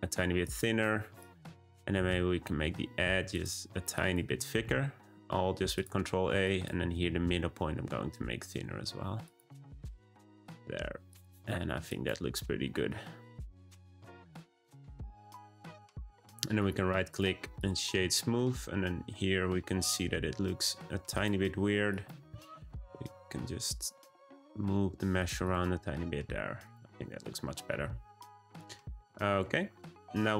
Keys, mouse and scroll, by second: 1.2 click, 1.9 ctrl+a, 3.9 click, 4.5 ctrl+a, 6.4 click, 6.9 ctrl+a, 9.7 click, 10.3 g, 11.9 click, 13.7 ctrl+a, 15.2 click, 15.4 Tab, 16.0-16.4 scroll up 1, 16.5-17.5 right drag, 17.5 click, 18.1-18.6 shift+middle drag, 18.6-19.7 scroll up 8, 19.7-21.1 scroll down 1, 21.1 click, 21.4 Tab, 21.9 click, 22.4 g, 25.4 click, 25.8-26.6 scroll down 4, 26.6 click, 26.8 Tab, 27.0-27.8 scroll down 3, 27.8-29.2 shift+scroll up 4, 29.3-30.3 shift+middle drag.